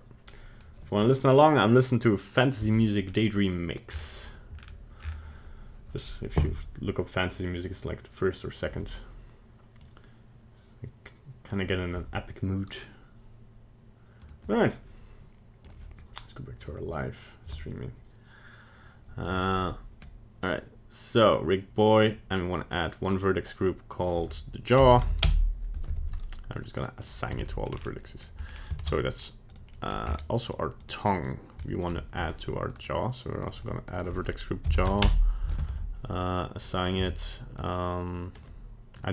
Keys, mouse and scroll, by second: 22.0 click, 23.0 click, 23.9 click, 24.0 click, 25.9 Tab, 27.0 click, 27.3 Tab, 27.5 middle click, 27.7-28.0 scroll down 4, 28.2 scroll up 1, 28.4 scroll down 2, 28.8 ctrl+Tab, 29.7 middle click, 30.0 scroll up 5, 30.4 right click, 30.8 right click, 31.1 right click, 31.6 middle click, 32.7 click, 33.4 click, 33.5 click, 33.8 click, 34.0 click, 35.6 Tab, 36.6 click, 37.0 Tab, 37.5 click, 38.4 click.